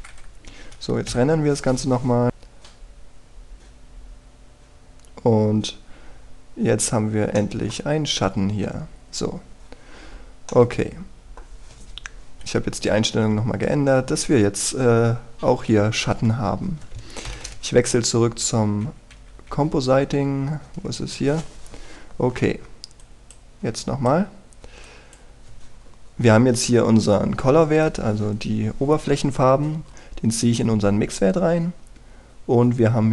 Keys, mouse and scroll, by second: 0.1-1.3 drag, 2.1 F12, 8.3-13.1 middle drag, 16.7 Escape, 18.3 ctrl+Left, 18.4 ctrl+Left, 19.4-20.5 typing, 22.8-23.9 scroll down 1, 23.9-27.1 drag, 27.7-28.8 scroll up 1, 28.8-33.1 drag.